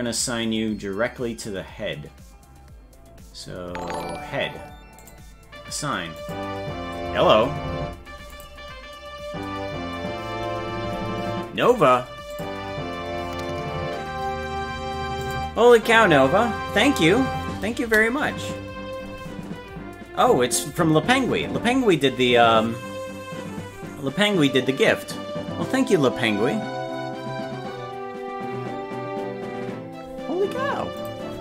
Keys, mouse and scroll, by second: 3.0-4.2 scroll up 12, 5.0 click, 6.2 click.